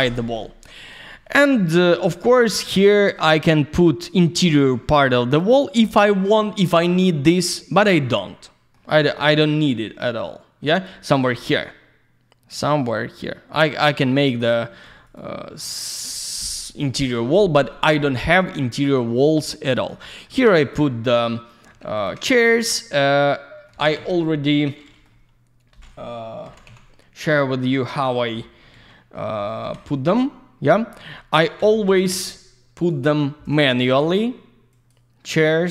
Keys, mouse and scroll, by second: 0.1 scroll down 1, 0.4 alt+middle click, 1.1 alt+shift+q, 1.5 alt+middle click, 1.9 alt+z, 2.2 middle click, 2.7 alt+z, 2.7 click, 3.1 middle click, 4.4 middle click, 5.0 middle click, 6.1 middle click, 6.9 middle click, 7.9 middle click, 9.0 middle click, 9.9 middle click, 11.3 middle click, 15.0 click, 15.1 click, 18.3 middle click, 19.4 alt+middle click, 20.0 middle click, 20.2 middle click, 20.6 click, 20.7 double click, 20.9 alt+middle click, 21.9 ctrl+click, 22.0 ctrl+click, 22.5 alt+middle click, 23.8 alt+w, 24.8 middle click, 25.0 middle click, 26.5 alt+w, 27.6 alt+middle click, 29.6 F3, 30.0 scroll down 1, 30.7 middle click, 31.1 scroll down 1, 31.8 middle click, 33.0 shift+click, 33.7 middle click, 34.7 click, 34.9 click, 35.3 middle click.